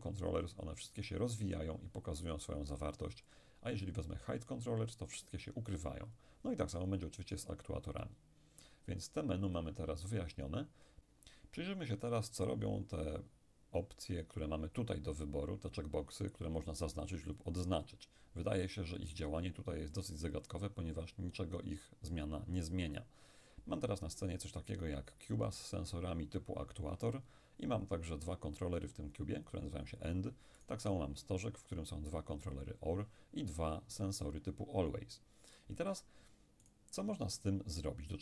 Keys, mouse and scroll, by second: 0.3 click, 3.3 click, 4.9 click, 6.8 click, 9.5 click, 11.1 right click, 17.4-22.0 drag, 30.6 right click, 36.7 right click.